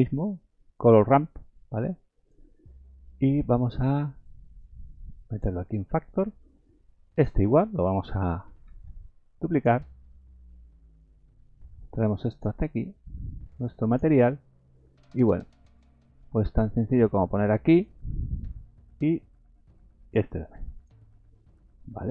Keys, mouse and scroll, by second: 0.9 click, 4.2 click, 6.1 middle click, 7.1 click, 8.7 shift+d, 9.9-11.1 scroll down 9, 10.6 middle click, 11.8 click, 13.2 click, 14.2-14.6 scroll up 4, 14.9 scroll down 1, 14.9 scroll down 1, 15.8 click, 19.2 click.